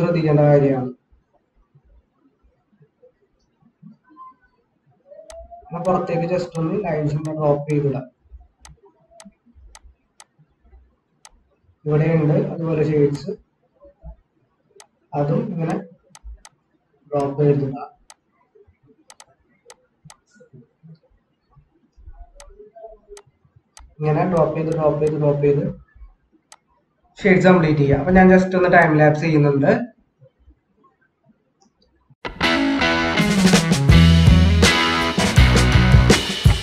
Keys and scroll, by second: 28.0 ctrl+-.